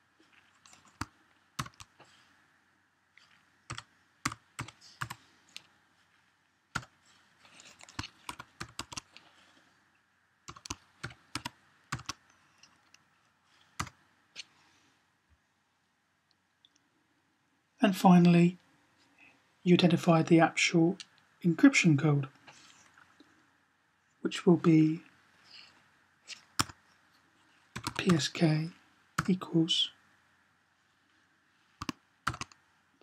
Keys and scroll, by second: 1.4 typing, 3.6-4.9 typing, 6.5 typing, 8.2-8.7 typing, 10.3-11.7 typing, 27.6-27.9 typing, 29.1 typing, 32.1 typing.